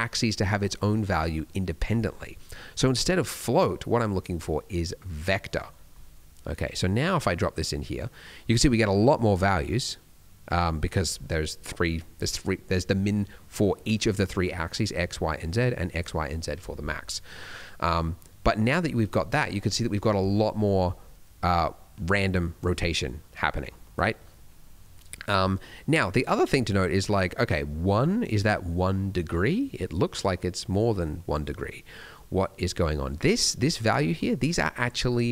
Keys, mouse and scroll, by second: 2.2 middle click, 2.4 scroll up 1, 3.2 click, 5.4-5.9 scroll down 2, 5.9 middle click, 6.6 click, 7.8 middle click, 8.1 scroll up 1, 8.4 middle click, 8.7 scroll up 1, 9.6 scroll up 1, 17.0 middle click, 17.5 middle click, 17.9-18.2 scroll down 1, 18.5 middle click, 19.1 middle click, 19.5 scroll up 1, 20.9 middle click, 21.4 scroll down 1, 22.3 click, 22.9 middle click, 23.3 middle click, 23.7 middle click, 24.0-24.5 scroll up 2, 24.8 middle click, 25.9 middle click, 29.3 middle click, 30.1 middle click, 31.8 scroll down 1, 32.1 middle click, 33.5 middle click, 33.9 middle click, 34.1-34.9 scroll up 1, 34.9-35.3 scroll up 1.